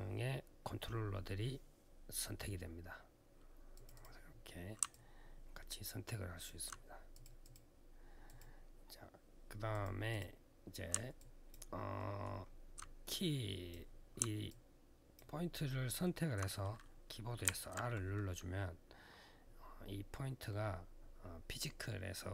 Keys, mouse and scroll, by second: 3.5 click, 3.7 click, 3.8 double click, 6.9 click, 7.2 click, 7.3 double click, 8.0 double click, 9.5 click, 9.9 click, 10.9 alt+click, 11.7 alt+middle click, 12.1 alt+scroll up 1, 12.9 click, 14.2 alt+click, 15.4 alt+middle click, 17.2 r.